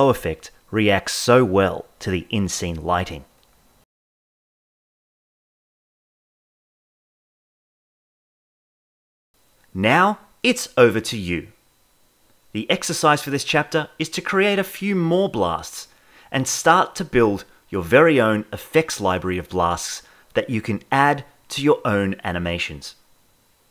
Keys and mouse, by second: 0.0-0.6 typing, 1.0 shift+middle drag, 1.4 Right, 2.0-3.7 typing, 2.2 click, 2.6 shift+middle drag, 4.1 click, 4.8 click, 5.8-6.2 Left, 6.2 click, 6.3 g, 7.6 click, 8.1 Left, 8.6 Left, 8.6 click, 9.4 Left, 10.6-15.7 shift+middle drag, 15.9-16.3 middle drag, 16.5 shift+middle click, 17.7 shift+Left, 17.8 space.